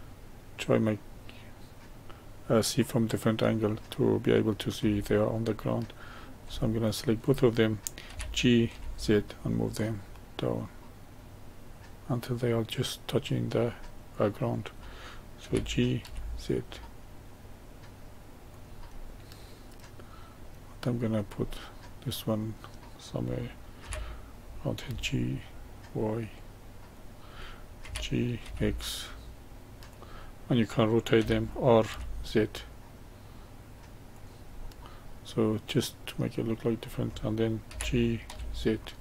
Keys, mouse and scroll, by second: 6.8 shift+click, 8.1 g, 13.1 click, 14.1 click, 15.4 g, 18.9-21.0 middle drag, 21.0 click, 21.4-23.8 middle drag, 23.8 g, 27.8 g, 31.2 r, 34.6-37.7 middle drag, 37.7 g.